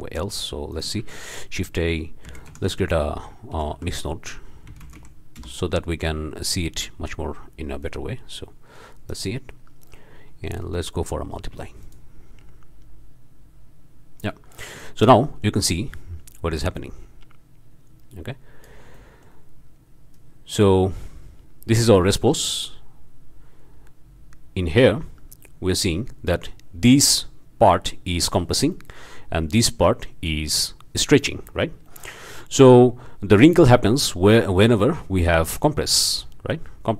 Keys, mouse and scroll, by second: 0.0 middle click, 0.3-1.0 drag, 0.7 shift+right click, 1.0 shift+a, 1.2 shift+click, 2.3 m, 2.5 u, 2.7 l, 3.5 BackSpace, 4.7 m, 4.8 i, 5.0 x, 5.4 Return, 6.4 click, 7.8-9.3 drag, 10.4 click, 11.8 click, 14.3-14.8 drag, 14.9-15.6 shift+drag, 16.6-18.8 drag, 18.9 click, 19.5-20.1 drag, 20.9-25.1 drag, 25.2-25.9 drag, 26.9-27.3 drag, 28.7-30.0 drag, 31.9-32.2 drag, 33.8-35.4 drag, 36.0-36.4 drag.